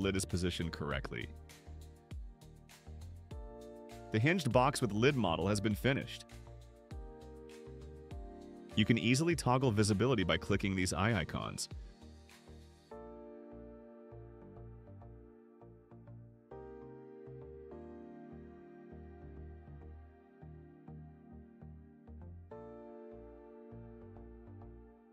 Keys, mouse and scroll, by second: 0.7 click, 1.2-6.7 drag, 8.4 click, 9.5 click, 10.2 click, 11.9-12.5 drag, 12.7 middle click, 12.7-13.1 scroll down 4, 13.0 middle click, 13.2-17.0 drag, 18.1 click, 18.5 click, 19.1-20.8 drag, 21.1 click, 22.1-25.1 drag.